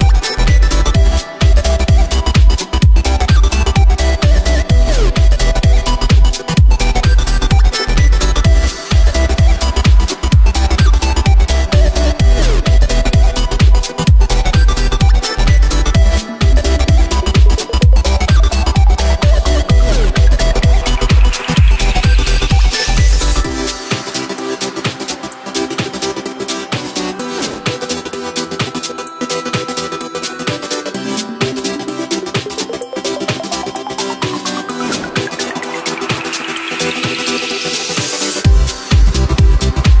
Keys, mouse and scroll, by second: 0.7 KP_1, 0.9 KP_Decimal, 1.6 middle click, 2.4-2.8 scroll down 1, 2.8-3.8 middle drag, 3.8 Tab, 4.5 2, 4.6 right click, 5.1-6.4 middle drag, 6.4 e, 10.0 2, 10.2 right click, 11.4 e, 15.2 ctrl+r, 18.0 right click, 18.7 1, 18.9 right click, 19.4 shift+right click, 20.3 ctrl+b, 27.6 Tab, 28.1-30.0 middle drag, 30.0 KP_7, 30.4-30.7 scroll down 2, 31.5 ctrl+r, 32.3 Tab, 33.2 ctrl+r, 34.6 3, 34.8 right click, 35.1 x, 35.4 click, 36.0 x, 36.8 Tab, 37.0-38.5 scroll down 7, 38.5-40.0 scroll up 2.